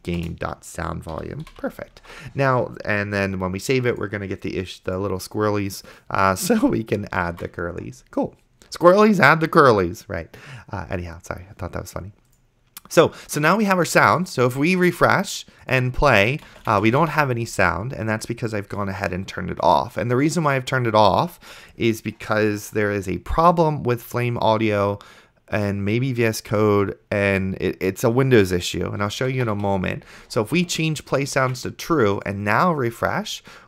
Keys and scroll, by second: 0.0-0.2 typing, 0.2 Return, 1.2 End, 1.5 ;, 2.4 ctrl+s, 7.7 ctrl+s, 16.5 space, 16.9 d, 29.2-30.1 typing, 31.8 ctrl+s.